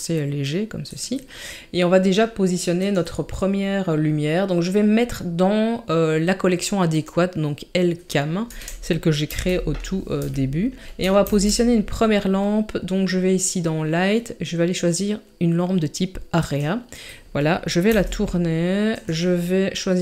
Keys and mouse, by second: 2.8 click, 9.2 n, 10.3 shift+middle click, 10.9 KP_3, 11.2 shift+a, 17.8 r.